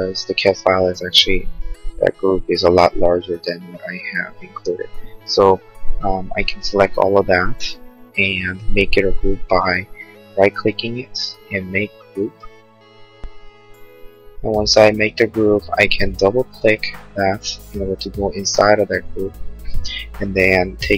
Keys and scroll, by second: 5.6 p, 9.9 Escape, 10.8 space, 11.0 Escape.